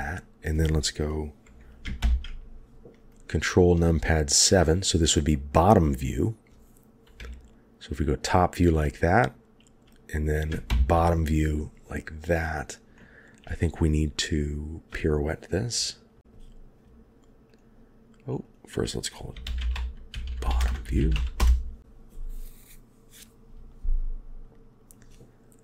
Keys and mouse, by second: 2.0 ctrl+KP_7, 7.2 KP_7, 10.7 ctrl+KP_7, 12.9-13.3 shift+middle drag, 18.4-21.4 drag, 20.2 t, 24.9 click.